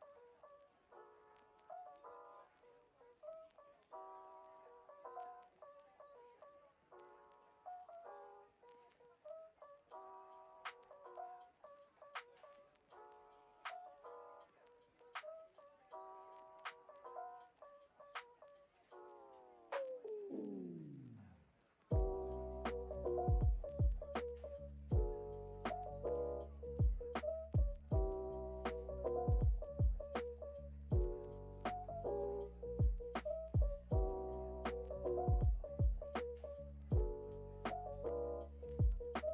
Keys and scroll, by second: 5.4 super+s, 7.2 super+[, 21.6 super+d, 27.6 shift+[, 29.8 Delete, 35.5 x, 37.6 o.